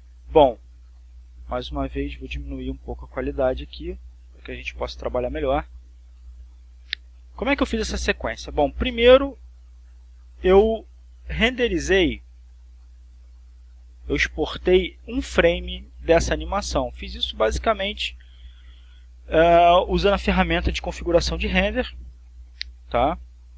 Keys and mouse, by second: 2.4 click, 3.5 click, 4.8-11.2 drag, 12.0 click, 13.0 click, 13.7 click, 21.7 click.